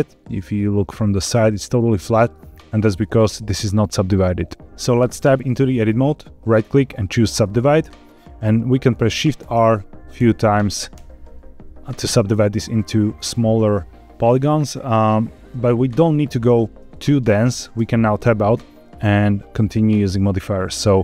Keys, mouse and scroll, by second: 2.5 scroll down 2, 2.9 shift+middle click, 4.6 ctrl+s, 5.0 Tab, 6.3-8.0 right drag, 9.3 shift+r, 10.1 shift+r, 10.9 shift+r, 17.7 Tab, 20.5 click.